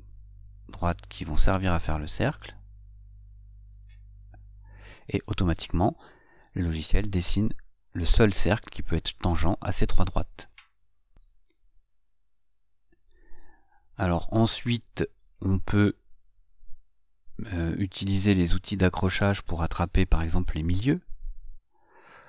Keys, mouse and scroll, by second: 7.6 click, 15.9 click, 18.4 scroll up 2, 20.8-22.2 shift+middle drag.